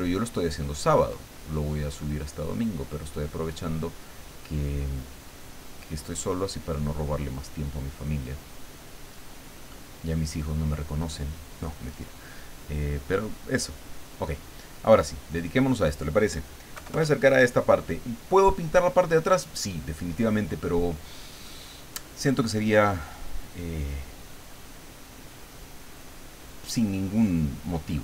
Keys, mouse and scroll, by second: 8.1-9.2 middle drag, 9.7 middle click, 13.2 click, 15.3 middle click, 16.7 KP_Add, 17.3-18.4 middle drag, 18.9 middle click, 20.1 middle click, 20.9 middle click, 27.9-28.0 drag.